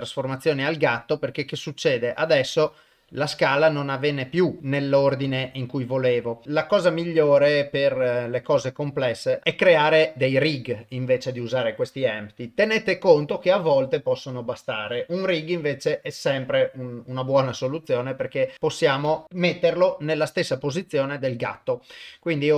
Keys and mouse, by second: 1.4-4.9 drag, 5.3 ctrl+z, 10.4 click, 19.1 Delete, 19.2 click.